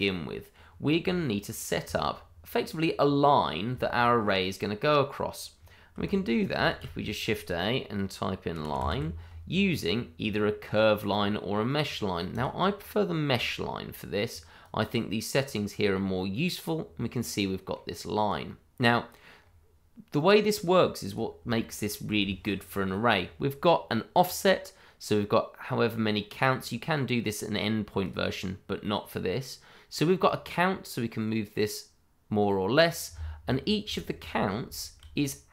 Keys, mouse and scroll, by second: 3.8 shift+middle click, 3.9 middle click, 4.0 shift+middle click, 6.0 ctrl+right click, 6.7 shift+a, 8.5 l, 8.7 i, 8.8 n, 12.3 click, 15.9-16.3 scroll down 1, 16.3 middle click, 18.2 click, 19.3-20.5 scroll up 1, 20.5 click, 21.5 shift+middle click, 21.6 middle click, 21.6 shift+middle click, 26.5 click, 30.2 click, 33.4-33.8 scroll up 1, 33.9 shift+middle click, 34.2-34.7 scroll up 1, 34.7 shift+middle click.